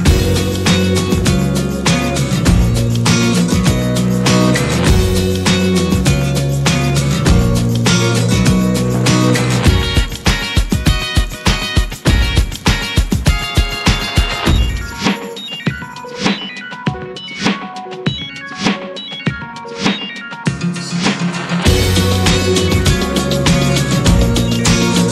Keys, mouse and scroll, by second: 0.9-4.9 drag, 5.5-7.2 drag, 7.2-7.7 scroll up 7, 7.3 shift+middle click, 8.1 s, 9.5 ctrl+1, 9.7 drag, 10.1-10.9 middle drag, 10.9 click, 11.1 scroll down 10, 11.7-12.3 shift+middle drag, 12.3 click, 13.6-16.9 drag, 17.8-18.3 drag, 19.0-20.7 drag, 20.9-21.8 shift+middle drag, 21.8 scroll up 1, 22.0-23.7 shift+middle drag, 23.7 click.